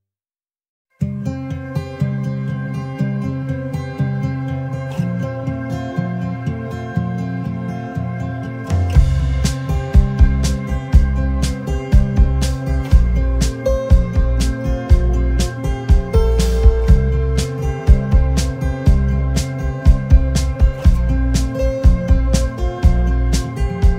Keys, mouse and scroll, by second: 0.4 alt+scroll down 1, 1.6 alt+scroll down 1, 1.9 alt+scroll up 1, 2.8 space, 3.6 alt+scroll down 1, 5.9 alt+scroll up 1, 6.8 ctrl+g, 8.3 alt+scroll down 1, 8.6 space, 14.1 double click, 16.4 alt+shift+click, 18.7 alt+scroll up 1, 18.9 alt+scroll down 1, 19.4 space.